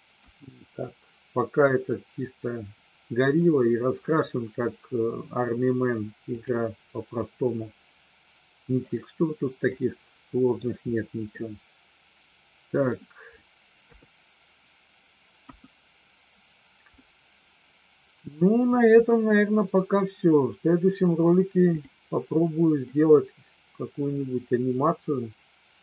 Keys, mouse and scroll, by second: 0.2 KP_1, 6.3 click, 9.6-10.6 middle drag, 11.3-12.9 middle drag, 13.9 KP_3, 15.4 KP_1, 21.6 click, 22.9-25.8 middle drag.